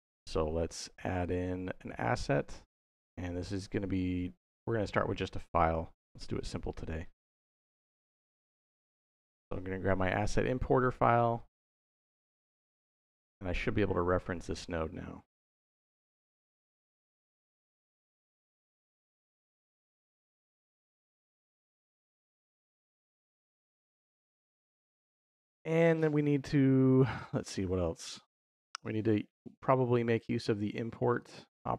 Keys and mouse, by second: 1.0-6.5 drag, 12.9 click, 16.1 click, 16.8 click, 18.6-20.6 drag, 21.1-22.1 drag, 31.0-31.7 drag.